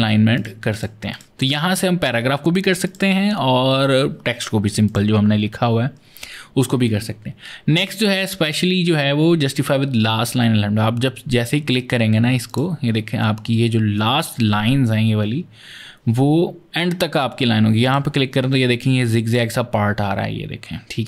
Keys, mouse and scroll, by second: 0.2 click, 0.5 click, 0.9 click, 2.7 click, 4.7 click, 12.3 click, 17.7 click, 19.1 click.